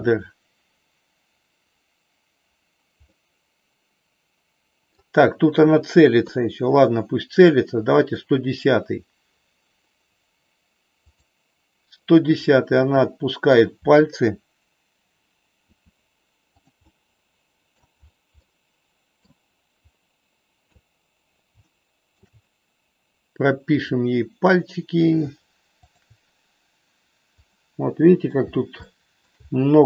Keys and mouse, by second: 3.0-5.0 middle drag, 6.2 KP_3, 8.0 click, 10.9 click, 12.7 middle click, 15.7 r, 16.7-17.7 middle drag, 18.4 middle click, 21.7 shift+middle click, 23.7 click, 27.6 middle click, 28.8 shift+middle click.